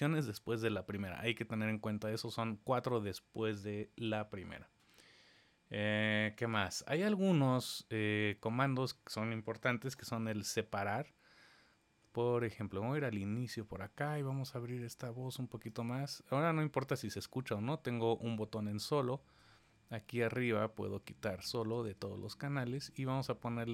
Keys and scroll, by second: 9.7 super+z, 10.0 super+z.